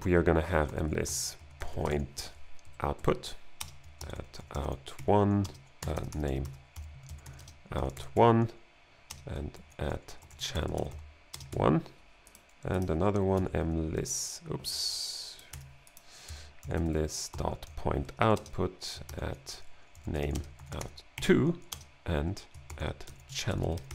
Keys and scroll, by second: 0.0-2.4 typing, 2.7 Down, 3.0 Right, 3.7-11.5 typing, 4.0 alt+g, 9.5 alt+g, 13.1-14.4 typing, 15.6-18.4 typing, 18.2 Right, 19.1 alt+g, 19.7-21.7 typing, 22.7 alt+g, 22.8-23.9 typing.